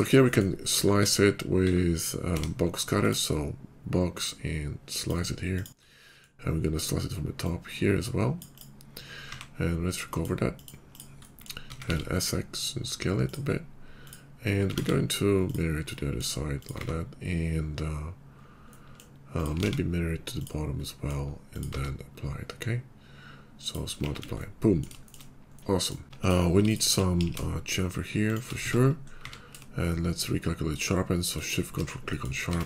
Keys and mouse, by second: 0.9 alt+w, 1.0-1.6 middle drag, 1.6 alt+w, 1.7-4.2 middle drag, 2.2 d, 4.2-11.2 drag, 9.2 q, 11.2-14.0 middle drag, 11.6 s, 14.0 click, 14.0-15.4 middle drag, 14.6 alt+x, 15.4 click, 15.8-19.1 middle drag, 16.7 q, 19.1 click, 19.3-20.3 alt+middle drag, 19.6 alt+x, 20.3 click, 20.8-24.7 middle drag, 21.6 q, 24.0 shift+2, 25.0 shift+middle drag, 26.0 Tab, 27.1 ctrl+b, 28.5 Tab, 29.1 q, 32.1 middle drag, 32.4 Tab.